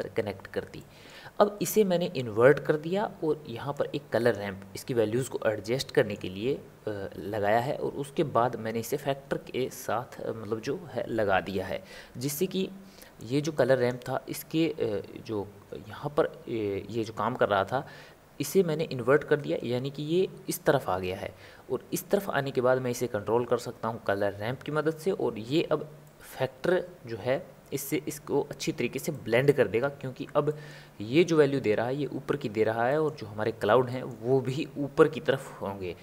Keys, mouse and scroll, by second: 3.7 click, 5.9-9.0 middle drag, 13.4 click, 26.0-36.0 middle drag.